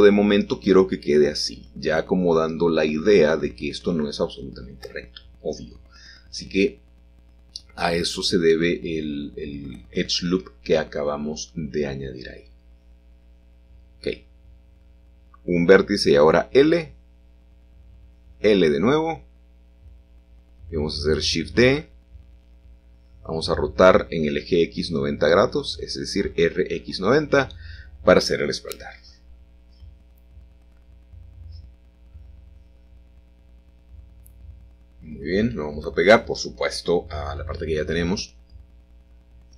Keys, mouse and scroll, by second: 2.2-3.4 shift+middle drag, 2.6-4.3 scroll down 1, 7.8-8.9 scroll down 1, 8.9-9.7 scroll down 1, 9.7 scroll down 1, 9.7-11.1 scroll up 1, 11.1-11.4 scroll up 1, 12.6-13.7 drag, 14.2 i, 17.3 i, 19.2 shift+d, 19.7 Escape, 20.2 r, 21.3 x, 21.5 9, 21.7 0, 22.1 Return, 25.6-26.4 scroll up 3, 27.8 typing, 30.3 click, 31.2 g, 32.0 y, 35.9 shift+click, 37.0 middle click, 37.9-39.0 scroll down 2.